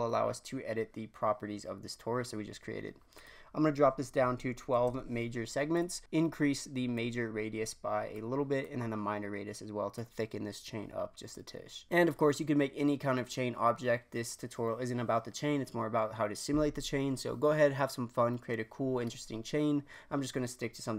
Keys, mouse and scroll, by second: 3.1-5.8 drag, 6.9-12.8 drag.